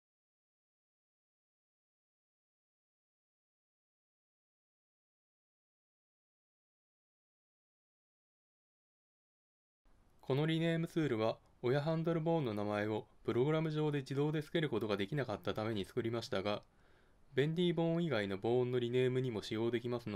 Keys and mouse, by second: 0.4 ctrl+space.